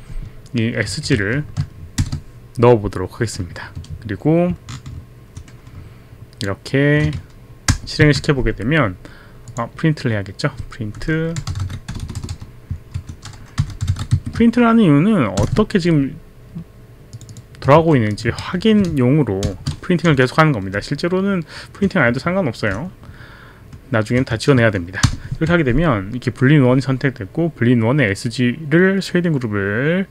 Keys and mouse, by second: 0.8-2.6 typing, 4.5 shift+Up, 5.7 shift+Left, 8.2 ctrl+Return, 9.5 click, 11.1-12.4 typing, 13.0 Up, 13.4-15.4 typing, 17.1 click, 17.8 ctrl+c, 18.1 click, 18.4 ctrl+v, 19.4 shift+0, 20.8 shift+Left, 21.8 shift+Up, 22.7 shift+Left, 25.0 ctrl+Return.